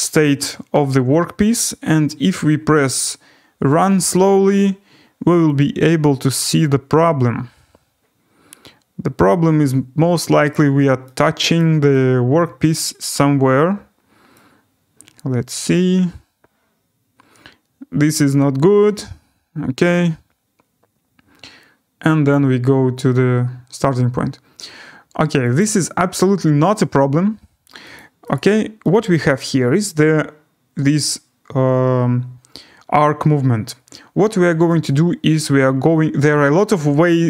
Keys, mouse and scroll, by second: 3.8 click, 10.5 click, 11.5 right click, 13.0 right click, 22.3 click, 22.6-23.4 scroll, 25.6 click, 27.9 click, 28.3 click, 29.4 right click, 29.7-30.6 scroll, 35.3 right click.